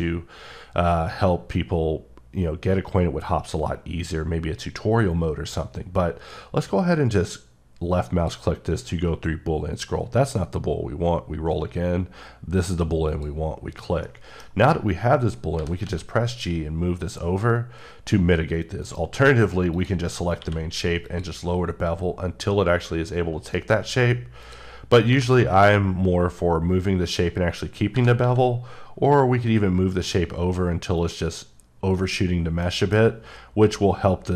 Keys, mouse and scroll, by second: 8.1 click, 10.9 scroll up 1, 13.1 click, 14.0 middle click, 15.6 g, 15.8 x, 18.8 right click, 19.7 click, 20.4 q, 21.0 click, 23.5 right click, 24.4 click, 25.1 g, 25.5 x, 27.1 click, 27.9 g, 28.2 x, 31.1 click, 32.6 middle click.